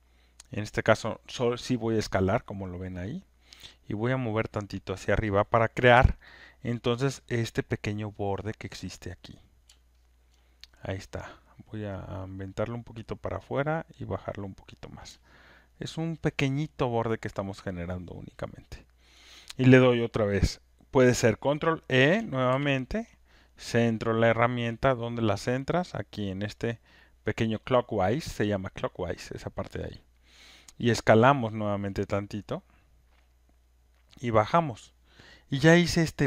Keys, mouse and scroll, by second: 0.7 click, 5.0 click, 6.2 alt+right click, 6.9 alt+click, 9.3 click, 10.3 alt+click, 12.6 click, 14.7 click, 15.6 alt+click, 16.1 alt+middle click, 16.5 alt+right click, 19.1 alt+click, 22.5 ctrl+e, 23.8 click, 25.1 click, 26.0 click, 30.2 click, 32.7 click, 34.7 click.